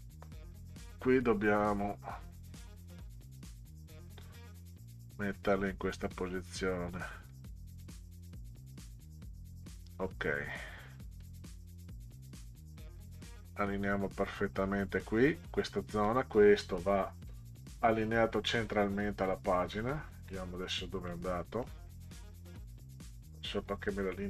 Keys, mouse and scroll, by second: 0.0-4.8 drag, 5.5 click, 6.1 click, 7.3 click, 7.8-9.3 drag, 11.2-13.6 drag, 16.1 click, 17.3 click, 19.6-19.9 ctrl+scroll down 6, 21.1-21.6 middle drag, 22.7 click, 23.2-24.2 drag.